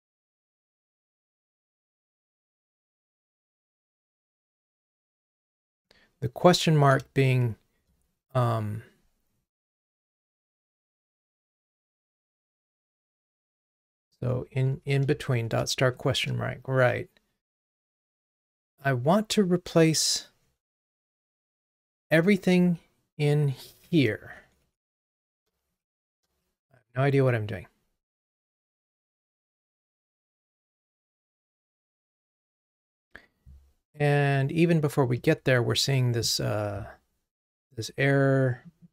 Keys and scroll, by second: 35.9 super+/.